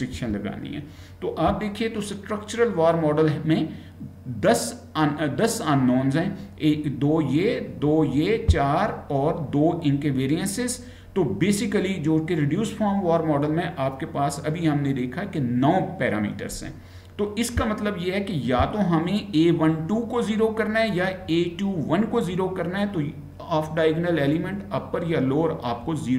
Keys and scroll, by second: 0.2 Right.